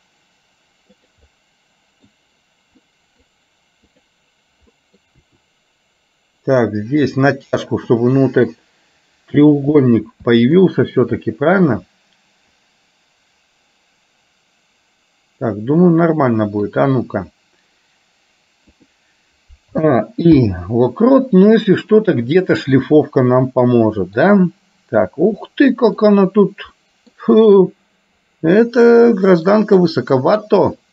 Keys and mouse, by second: 1.3 middle click, 2.9 middle click, 4.1 click, 4.8 middle click, 5.3 r, 8.2 middle click, 9.8 middle click, 10.4 middle click, 11.3-16.8 middle drag, 18.8 click, 20.6 i, 22.1 click, 22.8-24.2 middle drag, 25.4 middle click, 26.8 middle click, 30.1 middle click.